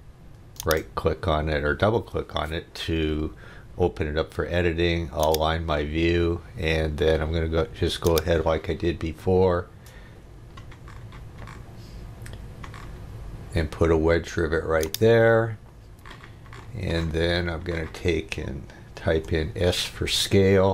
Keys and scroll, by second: 19.1 s.